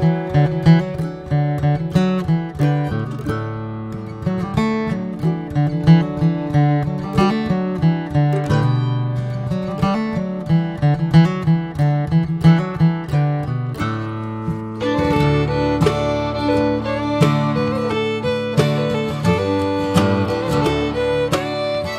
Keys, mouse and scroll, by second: 0.3 click, 1.1 click, 2.1 alt+shift+click, 3.5 alt+shift+click, 4.1 middle click, 4.5 scroll up 2, 4.8 shift+middle click, 5.2 scroll down 1, 5.4-6.6 middle drag, 6.6 right click, 8.5 right click, 9.0 shift+middle click, 9.7 right click, 11.7 right click, 12.2 middle click, 12.6 Tab, 12.8 click, 13.1 scroll down 3, 13.3-14.1 middle drag, 14.1 scroll up 2, 14.3 Tab, 14.5 middle click, 15.2 scroll up 1, 16.2 ctrl+r, 18.7 ctrl+z, 19.1 Tab, 19.3 click, 19.6-20.9 middle drag, 20.9 drag, 21.8-21.9 drag.